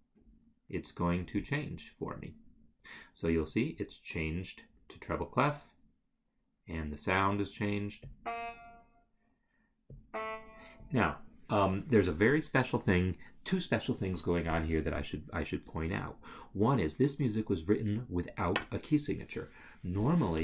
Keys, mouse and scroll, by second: 1.4 click, 8.0 click, 9.9 click.